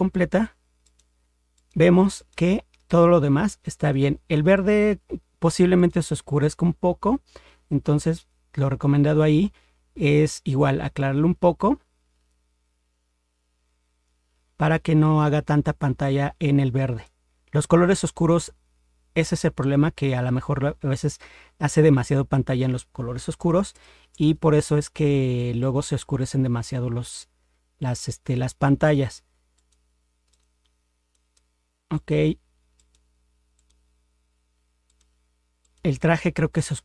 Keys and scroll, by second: 23.4 ctrl++, 23.7 ctrl++.